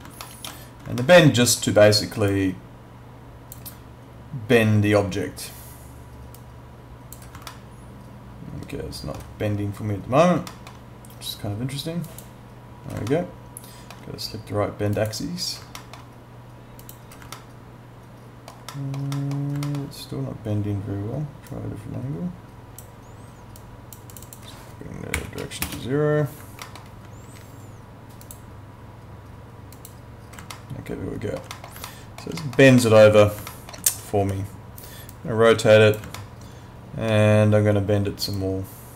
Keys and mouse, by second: 0.2 alt+middle click, 1.0 alt+middle click, 2.3 click, 6.4 click, 7.5 alt+middle click, 10.5 alt+middle click, 12.0 click, 13.1 alt+middle click, 15.0 click, 15.8 alt+middle click, 16.8 click, 17.4 alt+middle click, 19.7 alt+middle click, 21.5 click, 25.2 0, 25.6 Return, 25.6 KP_Enter, 26.6 alt+middle click, 28.2 click, 30.5 alt+middle click, 31.9 alt+middle click, 32.8 alt+middle click, 33.5 alt+middle click, 34.2 e, 35.1 click, 36.2 alt+middle click, 38.4 click.